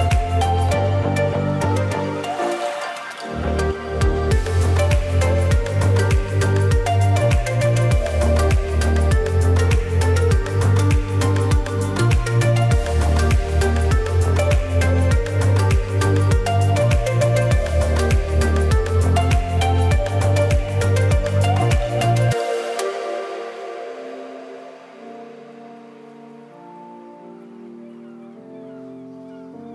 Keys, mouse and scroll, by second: 3.8-5.1 drag, 5.1 alt+scroll up 1, 5.5-12.0 drag, 13.3 alt+scroll up 1, 13.8-18.9 drag, 19.1 alt+scroll down 1, 19.6 click, 20.2 ctrl+g, 20.6 click, 21.4 ctrl+z, 21.7 click, 22.5 ctrl+g, 23.0-24.9 drag, 25.1 space, 25.3 click, 25.4 space, 26.2-29.7 drag.